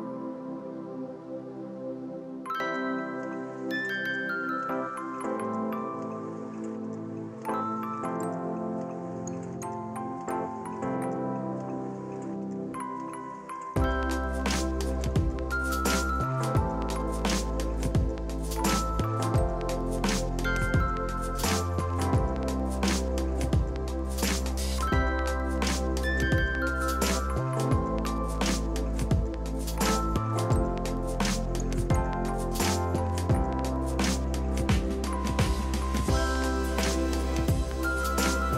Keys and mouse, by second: 0.2 click, 33.7 click.